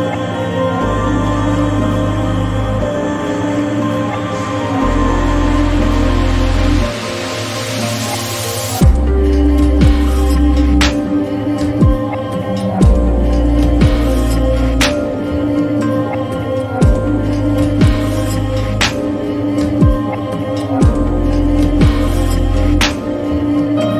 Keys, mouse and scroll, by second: 1.7-3.1 drag, 11.2 click, 11.2-21.2 drag, 16.4 typing.